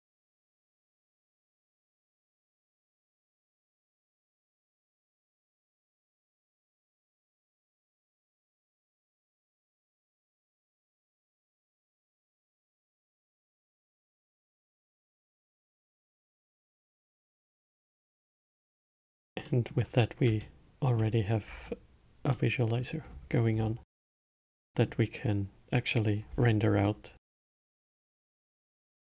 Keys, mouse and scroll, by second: 5.8 drag, 9.8-10.3 middle drag, 10.3 space, 17.3 space, 17.8-18.4 scroll down 2, 18.4-19.2 alt+middle drag, 19.2-19.8 scroll up 4, 19.8-21.8 middle drag, 21.8-22.7 scroll down 2, 22.7-23.4 middle drag, 23.4-23.9 scroll down 2, 23.9-24.9 scroll up 2, 24.9-27.9 middle drag, 28.5-29.0 alt+middle drag.